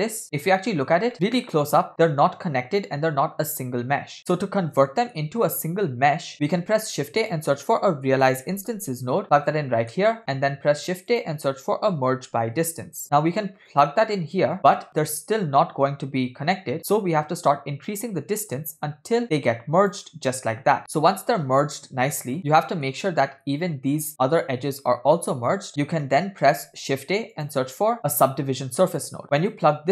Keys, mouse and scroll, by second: 1.1 middle click, 4.2 scroll down 2, 4.3-5.2 middle drag, 6.3 middle click, 6.3 scroll up 3, 6.5 shift+a, 10.0 middle click, 10.2 shift+a, 14.6 click, 15.1 middle click, 15.6-16.0 scroll up 1, 16.8 scroll up 2, 16.8 middle click, 17.4-20.1 shift+drag, 20.6 scroll down 2, 20.8-22.2 middle drag, 22.3 scroll up 2, 22.4-23.0 shift+middle drag, 25.4 shift+click, 25.7 scroll down 7, 26.0 middle click, 26.9 shift+a.